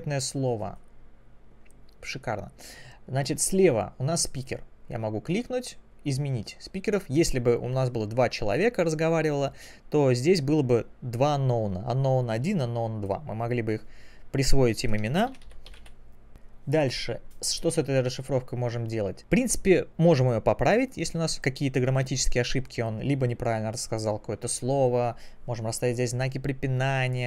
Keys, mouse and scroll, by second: 0.0 click, 0.7 click, 2.8-3.4 scroll up 2.